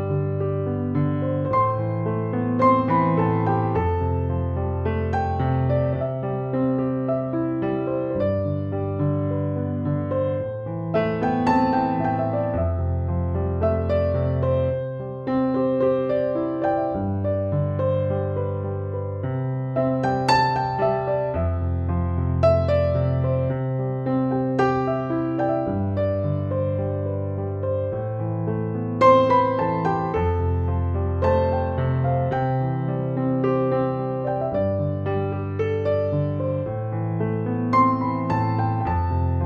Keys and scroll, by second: 6.9-8.1 typing.